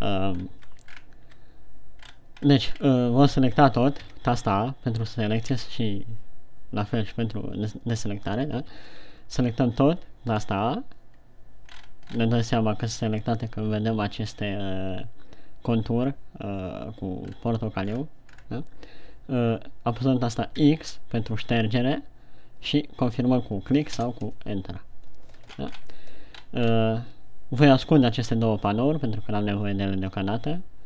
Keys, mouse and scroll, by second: 0.4-2.2 ctrl+scroll down 4, 2.5-3.0 scroll up 5, 3.3 scroll down 2, 4.4 a, 6.0 a, 9.1 a, 12.2-14.2 scroll up 9, 17.9-18.5 scroll up 2, 18.5-19.4 scroll down 8, 21.1 x, 25.9-26.8 shift+scroll down 5, 26.8-27.8 scroll up 4.